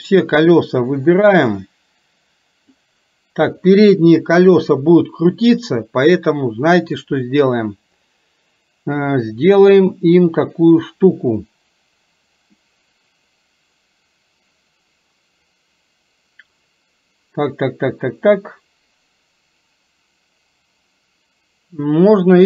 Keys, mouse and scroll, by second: 0.0-2.9 drag, 12.6-22.4 middle drag.